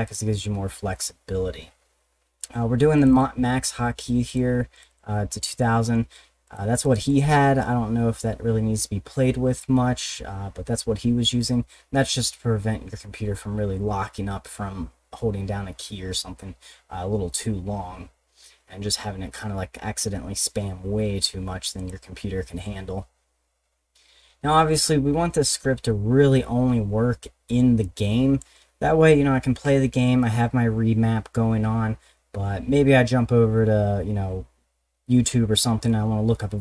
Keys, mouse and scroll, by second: 0.1 click, 3.0 click, 3.1 click, 4.3 click, 4.7 click, 4.9 click, 5.4 click, 6.5 click, 6.8 click, 7.0 click, 21.8 click, 27.6 click.